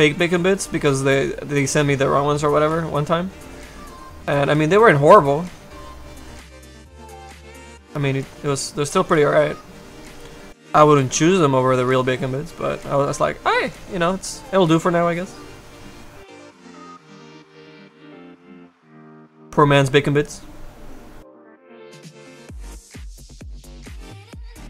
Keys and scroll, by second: 18.5 s, 22.4 s.